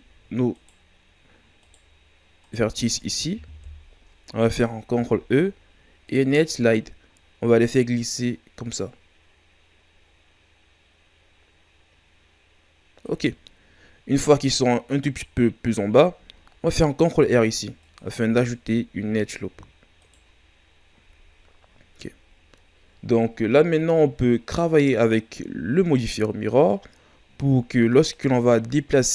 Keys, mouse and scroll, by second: 0.5 shift+right click, 1.6 shift+right click, 2.4 shift+right click, 3.5 KP_1, 4.9 ctrl+e, 17.1 ctrl+r, 20.0 right click, 21.0 scroll down 3, 22.6 shift+scroll up 2, 23.4 ctrl+scroll down 2, 24.3-27.9 scroll up 3, 28.0 shift+scroll down 1, 28.4-29.1 scroll up 2.